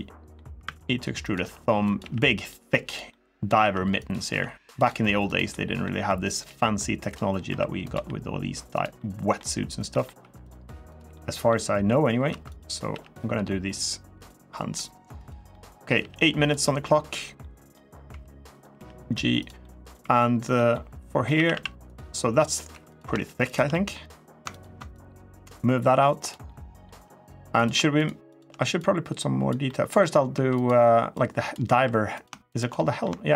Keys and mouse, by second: 0.4 e, 1.0 click, 1.2 s, 1.6 click, 1.8 g, 2.6 click, 2.9 middle click, 3.2 click, 3.4 r, 3.7 click, 4.0 s, 4.5 click, 4.7 g, 5.0 click, 5.3 middle click, 6.2 g, 7.2 r, 7.6 click, 7.7 g, 8.5 click, 8.7 middle click, 9.7 middle click, 10.0 3, 10.2 click, 10.6 click, 10.9 middle click, 12.1 2, 12.3 click, 12.7 g, 13.9 click, 14.2 middle click, 14.9 click, 15.3 middle click, 15.7 g, 16.2 click, 16.4 middle click, 17.2 middle click, 17.9 2, 18.3 click, 18.5 g, 19.2 click, 19.4 middle click, 19.8 3, 20.3 click, 21.1 a, 21.3 a, 22.5 2, 22.7 click, 23.2 shift+click, 23.5 middle click, 24.3 ctrl+click, 24.7-26.1 drag, 26.2 middle click, 28.6 click, 29.4 middle click, 30.1 2, 30.4 click, 30.9 click, 31.5 3, 31.9 click, 32.5 middle click, 33.2 shift+click.